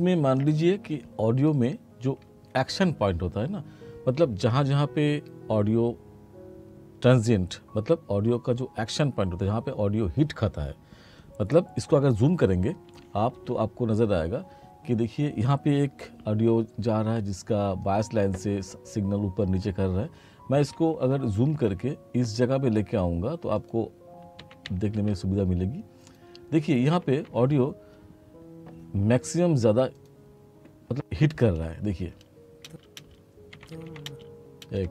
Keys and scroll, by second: 12.9 t, 20.6 r, 24.4 t, 26.9 t, 32.1 space, 33.5 r, 34.1 space.